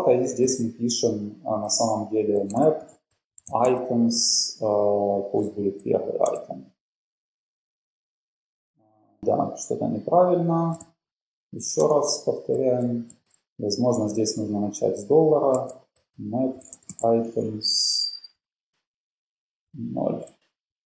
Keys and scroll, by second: 0.6-3.8 typing, 5.2-5.9 typing, 6.4 Return.